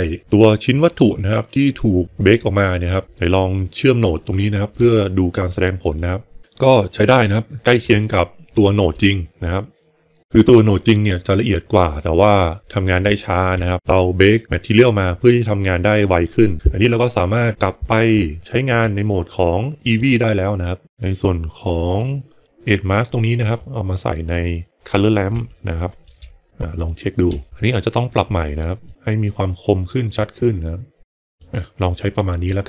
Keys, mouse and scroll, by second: 3.5 click, 5.9 ctrl+shift+click, 8.5 ctrl+shift+click, 18.6 click, 22.4 click, 23.5-24.9 drag, 25.4 shift+middle click, 26.6 ctrl+shift+click, 28.8 click, 30.1 click.